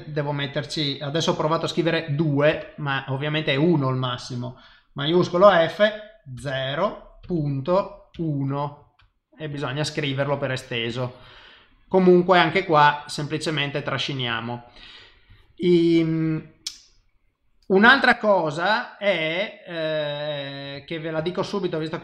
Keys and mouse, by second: 5.4 shift+f, 8.9 KP_Enter, 9.5 click, 10.9 click, 14.4 shift+click, 15.9 click, 17.9 shift+middle click, 20.9 ctrl+middle click, 21.2 shift+middle click.